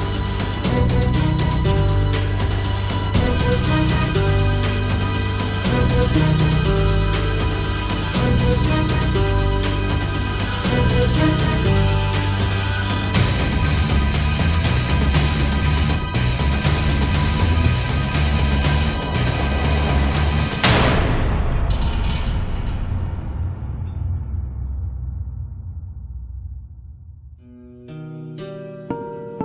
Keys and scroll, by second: 0.2 space, 6.0 ctrl+-, 11.1 space, 14.3 ctrl+-, 17.2 ctrl+-, 19.3 ctrl+=.